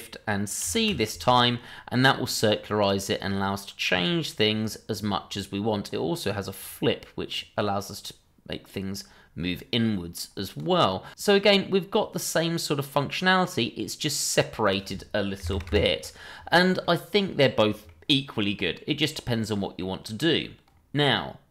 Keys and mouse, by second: 0.6 ctrl+shift+c, 2.2-5.8 drag, 6.5 click, 7.3-10.6 drag, 11.3 click, 11.6 click, 12.1-14.9 drag, 15.0 click, 16.8-17.8 middle drag, 19.4-19.8 middle drag, 20.0-20.4 middle drag.